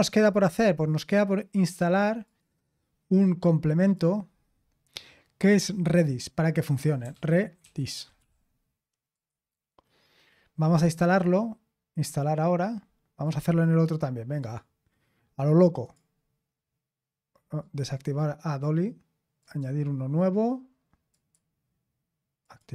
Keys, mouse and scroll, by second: 0.0 click, 2.2 click, 3.8 click, 6.7 click, 6.8-8.6 typing, 9.1 click, 12.0 click, 13.2 click, 14.4 click, 15.8 click, 17.6 click, 19.4 click, 21.1 click, 22.4 click.